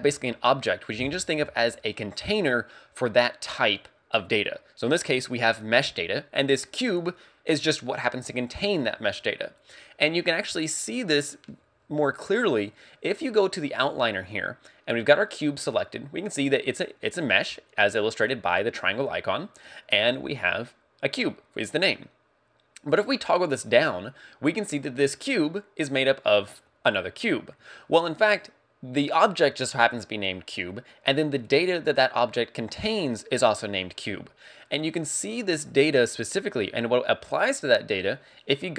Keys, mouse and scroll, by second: 23.1 click.